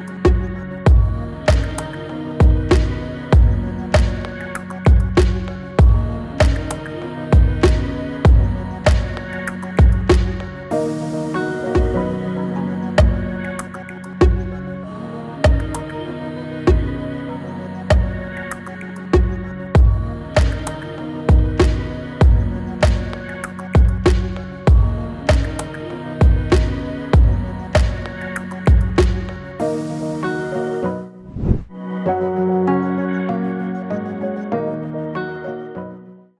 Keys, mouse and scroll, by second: 1.3-4.2 drag, 4.2 space, 12.0-13.8 drag, 13.8 Return, 14.6 Return, 16.8 click, 17.5 click, 22.5-24.7 drag, 24.7 space.